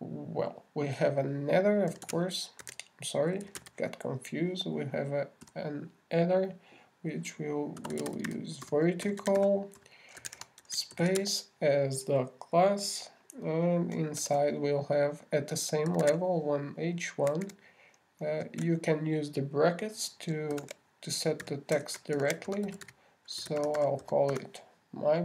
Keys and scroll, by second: 15.6 shift+<, 19.7 alt+shift+8, 21.9-23.9 typing.